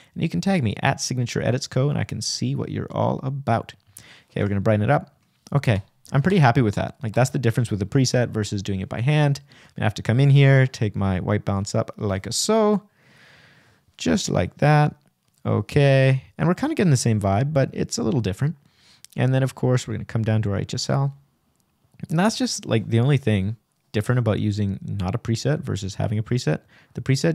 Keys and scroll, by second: 26.5 Return.